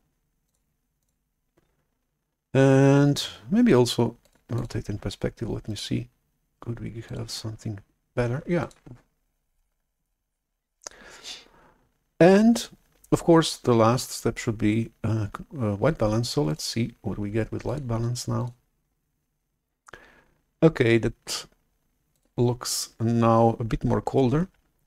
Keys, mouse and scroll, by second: 0.4 drag, 0.9 click, 4.5 click, 5.6 ctrl+click, 7.0 click, 7.4 click, 8.5 click, 16.4-20.8 drag, 22.1-24.6 drag.